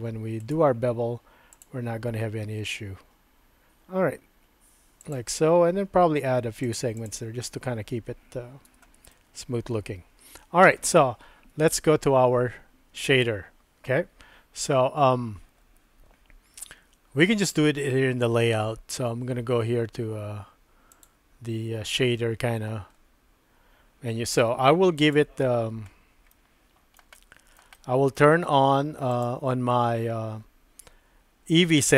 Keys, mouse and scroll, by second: 0.4-5.2 right drag, 2.3 typing, 6.6 click, 6.9 click, 8.7 Tab, 8.7 typing, 9.1-10.8 middle drag, 21.0 click, 25.1 click, 26.3 shift+middle click, 27.1 middle click, 27.7 shift+middle click, 29.2 click.